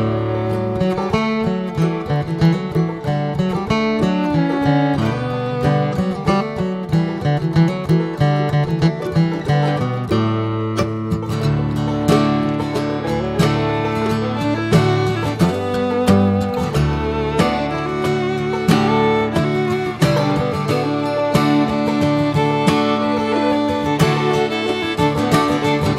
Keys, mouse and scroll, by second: 2.2-2.8 scroll down 1, 2.8 s, 5.0 click, 6.3 alt+middle click, 6.9 scroll up 3, 7.4-7.7 shift+middle drag, 7.7 s, 10.1-10.7 middle drag, 10.7 Tab, 11.1 middle click, 11.4 Tab, 11.6 click, 11.9-12.4 shift+middle drag, 12.4 click, 12.6 right click, 13.8 alt+middle drag, 15.0 click, 15.3 scroll down 1, 15.9 click, 16.2 drag, 17.0 drag, 17.6-18.0 middle drag, 18.0 scroll up 1, 18.3-19.5 shift+middle drag, 20.3 alt+middle click, 20.9 s, 22.0-22.4 middle drag, 22.4 scroll up 1, 22.7 Tab, 23.3 click, 24.6 3, 25.0 click, 25.4 shift+middle click, 25.8 s.